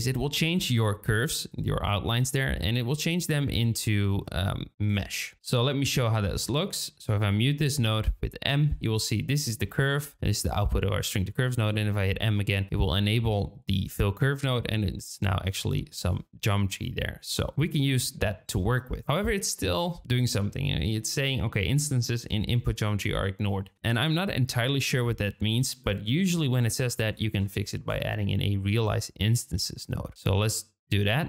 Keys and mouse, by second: 1.4 shift+middle click, 2.3 shift+middle click, 4.7 click, 5.8-6.2 middle drag, 7.8 m, 9.6 middle click, 11.1 m, 11.8 middle drag, 16.2-16.8 shift+drag, 17.4 drag, 18.1 shift+click, 23.5 click, 24.2 click, 25.4 shift+a, 29.9-31.2 drag.